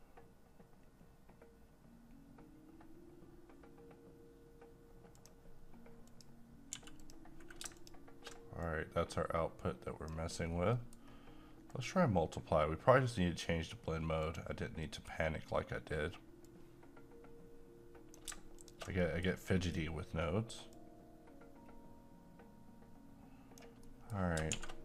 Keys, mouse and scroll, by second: 5.2 click, 6.7 g, 7.0 click, 8.7-10.4 drag, 10.4 scroll down 1, 10.7 middle click, 11.0-11.5 scroll down 1, 11.7 click, 14.2 click, 14.8 middle click, 16.5-18.6 drag, 19.0 shift+middle click, 19.4-19.7 scroll up 1, 20.7-23.8 drag, 23.8 middle click, 24.5 a.